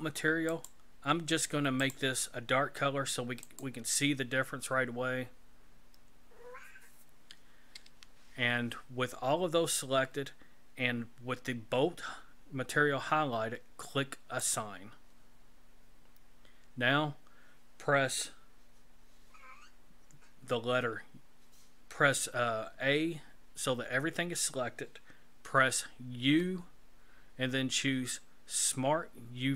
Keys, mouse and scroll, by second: 0.5 click, 1.9 click, 14.5 click, 22.8 a, 26.2 u.